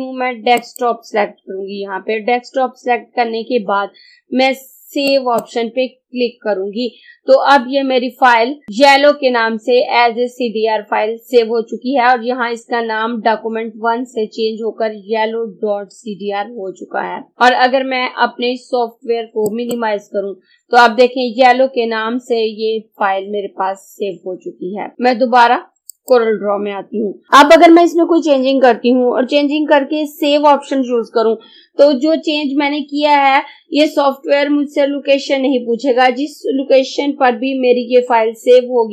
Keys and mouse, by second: 0.6 click, 5.1-8.1 drag, 19.5 click, 26.0 click.